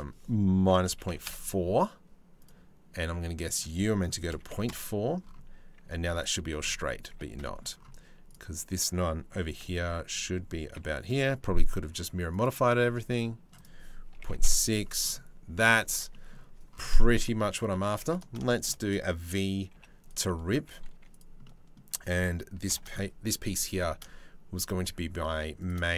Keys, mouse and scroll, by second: 2.0 click, 3.1-4.3 drag, 6.7 1, 7.0 shift+middle click, 9.0 g, 13.2 click, 15.6 Tab, 17.1 Tab, 17.4 2, 18.1 shift+middle click, 19.3 v, 19.9 click, 20.6 3, 21.0 click, 22.3 ctrl+l, 23.4 e.